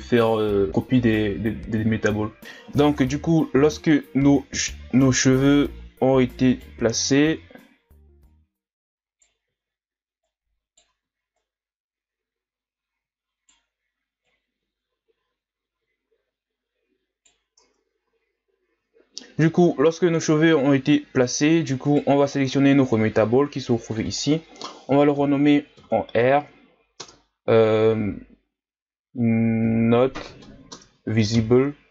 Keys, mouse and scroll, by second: 0.1 right click, 0.3-1.6 drag, 1.6 KP_1, 2.2 scroll down 1, 2.5 Tab, 3.0-5.0 scroll down 1, 5.4-5.8 scroll up 4, 5.8-6.5 scroll down 4, 6.5 right click, 6.9 Tab, 8.2-9.4 right drag, 9.4 ctrl+z, 10.2 right click, 11.0 ctrl+z, 11.4-17.2 right drag, 17.6 Tab, 18.1 a, 18.3-19.0 scroll down 2, 19.0-19.5 scroll up 2, 20.4-21.3 scroll up 2, 21.3-21.8 scroll up 1, 21.8-23.9 right drag, 23.9-31.9 drag.